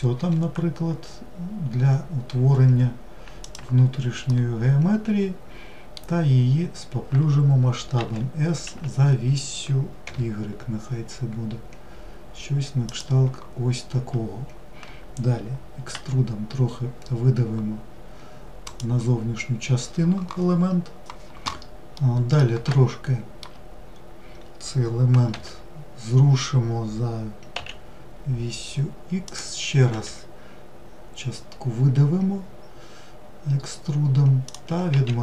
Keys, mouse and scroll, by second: 2.8-6.0 middle drag, 20.7-22.6 middle drag, 22.6-24.1 scroll up 1, 24.1 g.